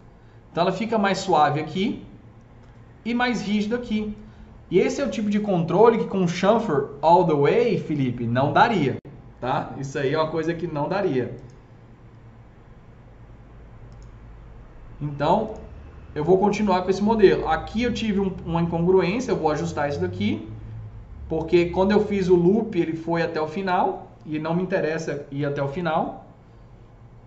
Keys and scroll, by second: 25.9 F3.